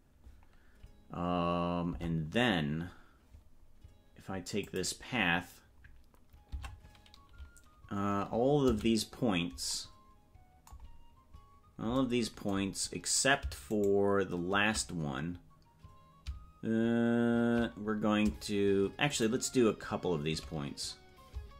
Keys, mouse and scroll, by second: 4.6 click, 6.5 Tab, 8.7 a, 13.7-14.7 shift+right drag.